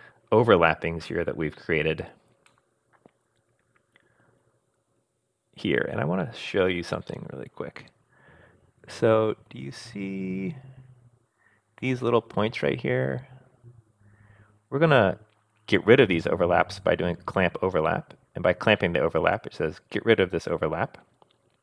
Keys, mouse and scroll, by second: 2.5-5.7 middle drag, 4.7-5.7 scroll up 4, 7.1-9.6 middle drag, 9.7-11.2 scroll up 2.